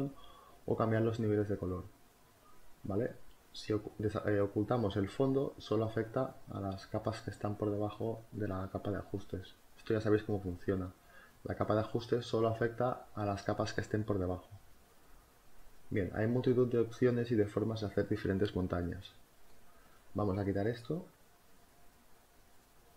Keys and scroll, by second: 16.4 ctrl+alt+z, 18.3 Delete, 22.8 Delete.